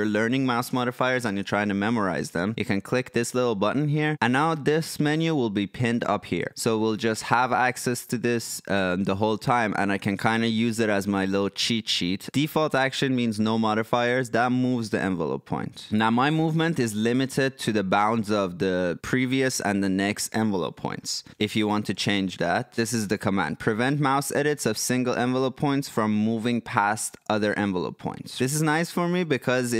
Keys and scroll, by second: 21.2-23.3 typing.